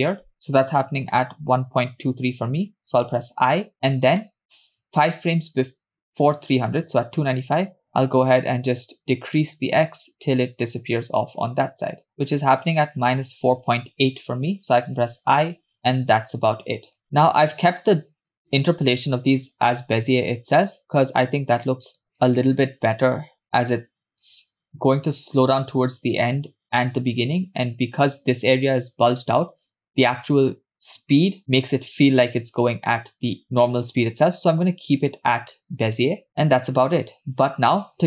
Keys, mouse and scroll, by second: 0.3 shift+click, 3.3 i, 3.7-4.2 scroll down 2, 4.2 middle click, 5.8 click, 7.9-13.3 shift+drag, 16.3-16.7 scroll down 3, 17.1 scroll down 2, 17.1 click, 19.8 space, 22.0 click, 24.7 space, 34.0 space, 35.9 space, 36.3 scroll down 1, 36.5 space.